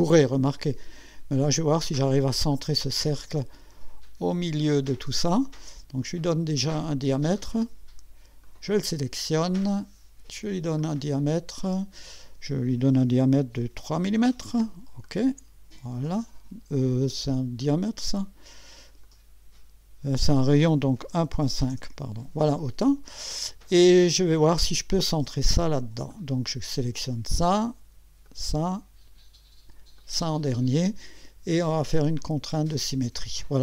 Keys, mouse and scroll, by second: 2.5 click, 4.6 click, 5.1 middle click, 6.6 middle click, 7.4 middle click, 8.4 click, 10.8 click, 11.7 click, 15.0 click, 17.6 click, 18.9 click, 20.8-22.0 typing, 26.1 click, 28.3 click, 30.0 click, 32.2 click.